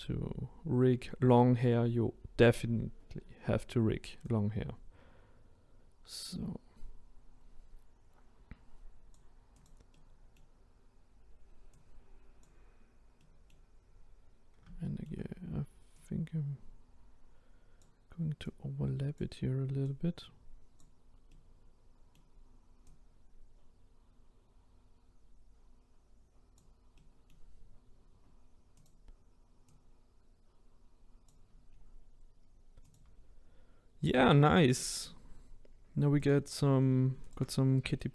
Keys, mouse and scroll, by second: 4.5 click, 9.6 click, 9.9-11.8 middle drag, 11.8 click, 13.2 middle click, 13.9-14.8 scroll up 1, 14.8-16.1 shift+middle drag, 16.1 click, 18.5 click, 21.3-23.0 middle drag, 23.0 click, 27.0-28.8 middle drag, 28.8 click, 29.8 click, 31.7-32.9 scroll down 1, 32.9 click, 34.3-36.3 shift+middle drag, 36.3 click, 37.3 shift+click.